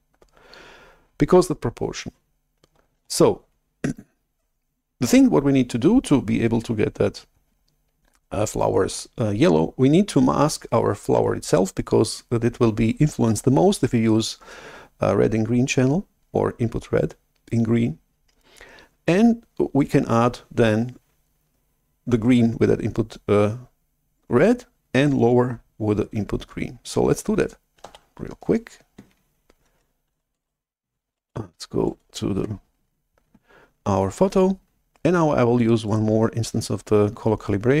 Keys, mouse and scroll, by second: 3.1 shift+super+F11, 27.9 shift+super+F11, 30.2 alt+Tab, 31.1 alt+Tab, 32.6 alt+Tab, 36.0-37.8 right drag.